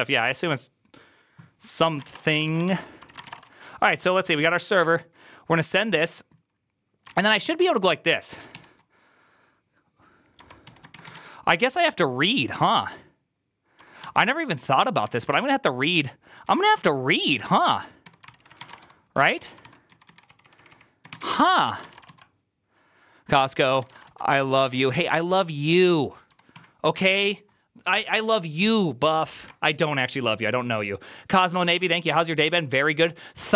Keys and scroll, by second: 1.6-3.1 typing, 2.9 Return, 2.9 ctrl+c, 3.2 Return, 6.8-8.9 typing, 10.2-11.5 typing, 13.9 ctrl+y, 14.9 Tab, 15.2 ctrl+c, 16.1-16.8 typing, 17.9 Tab, 18.1 ctrl+c, 18.4 ctrl+-, 18.4-22.2 typing, 19.5 ctrl+c, 23.5 ctrl+c, 23.7 typing, 23.9 Return, 23.9 ctrl+u, 24.7 ctrl+d, 25.3-26.9 typing.